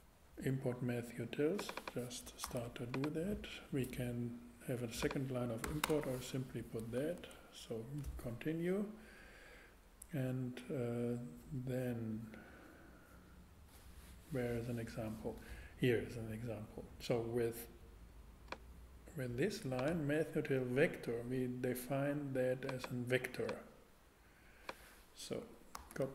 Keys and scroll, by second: 2.4 super+c, 5.6 ,, 5.9 space, 6.0 super+v, 7.3 super+Tab, 25.7 super+c.